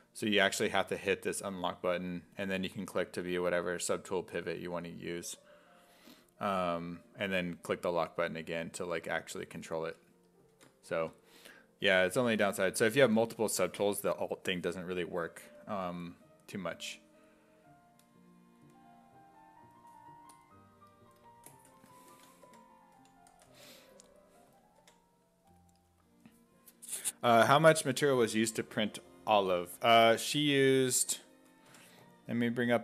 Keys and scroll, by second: 10.6 ctrl+z, 22.1-24.8 typing.